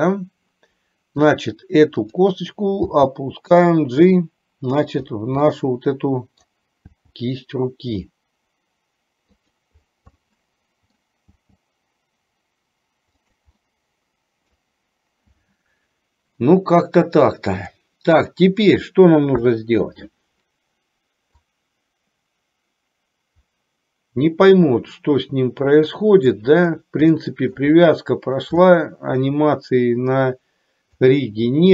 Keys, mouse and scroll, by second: 0.1-1.3 middle drag, 2.1 click, 2.9 g, 5.6 scroll up 1, 5.7 middle click, 7.2 g, 10.3 middle click, 11.4 g, 13.7-14.7 middle drag, 17.7-18.7 drag, 19.6 KP_1, 21.7-26.7 drag, 27.2 shift+middle click, 27.8 middle click, 28.8 shift+middle click, 31.2 click.